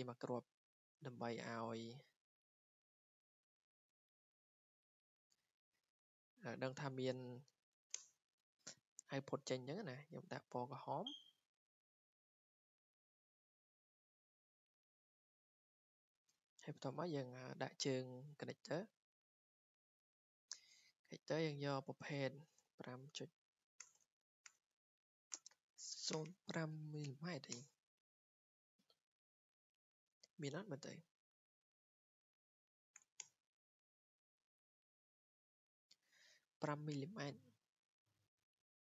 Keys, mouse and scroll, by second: 1.1 click, 3.6 Escape, 4.2 w, 4.8 click, 5.3 click, 5.8 Escape, 6.0 Escape, 6.4 click, 6.5 click, 6.9-8.2 typing, 8.3 Escape, 9.6 w, 10.1 click, 11.2 click, 11.4 Escape, 11.6 Escape, 12.4 click, 13.3 click, 13.6 w, 14.2 click, 15.4 click, 15.6 Escape, 15.8 Escape, 16.1 Escape, 16.1 scroll down 4, 16.8 ctrl+s, 17.3 scroll, 18.6-19.8 scroll, 20.6 click, 21.3 scroll down 4, 22.0 click, 22.4-27.4 typing, 26.9 click, 27.5 Return, 31.7-33.0 typing, 32.1 click, 32.7-37.2 drag, 33.2 Return.